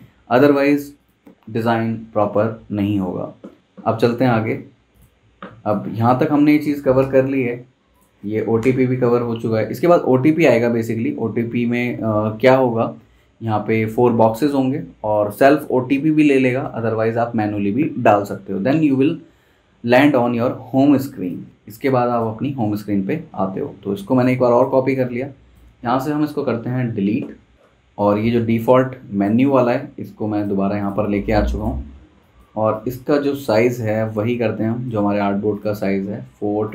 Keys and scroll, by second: 6.2 super+z, 7.0 BackSpace, 8.6 BackSpace, 23.2 super+d, 26.9 BackSpace.